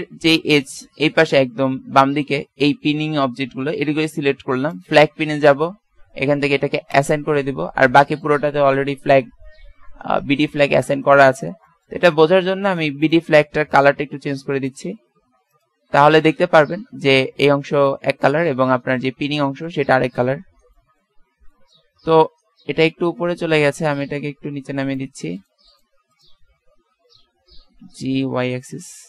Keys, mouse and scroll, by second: 4.7-6.5 drag, 6.9-8.0 drag, 8.0-9.7 middle drag, 10.5 a, 10.9 z, 11.3-12.7 middle drag, 12.7-13.9 drag, 15.9 Tab, 16.4-17.6 middle drag, 22.2 Tab, 24.0 click, 27.8 g.